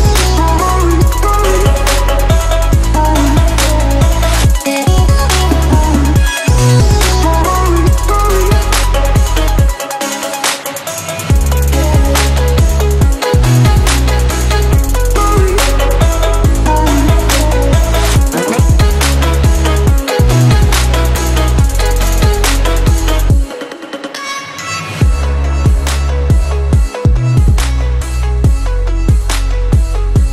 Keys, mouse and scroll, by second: 0.9 Up, 2.3 click, 4.5-5.9 drag, 18.2-18.6 drag, 20.0 space, 20.1 click, 20.3 space, 21.0-21.7 drag, 24.9-25.3 alt+drag, 27.7 ctrl+-, 28.2 space, 28.5 click, 28.6-29.0 space, 29.2 click, 29.4 space.